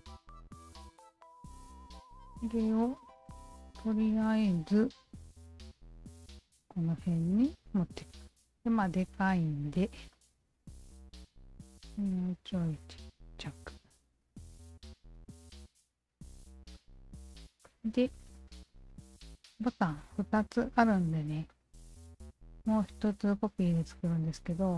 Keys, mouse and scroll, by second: 0.7 click, 1.6-1.9 alt+right drag, 2.4 click, 2.8 alt+middle drag, 3.5 w, 3.9-4.3 alt+right drag, 4.3-5.1 alt+drag, 5.6-6.9 alt+drag, 7.1-7.9 alt+drag, 8.4 f, 9.1 alt+right click, 10.2 r, 10.6 alt+right click, 10.9-13.3 shift+drag, 14.2 w, 14.4-15.0 alt+drag, 15.6-16.4 alt+drag, 16.8-17.4 alt+drag, 17.6 alt+click, 18.1 alt+middle click, 18.5-19.1 alt+right drag, 21.5-24.2 alt+drag.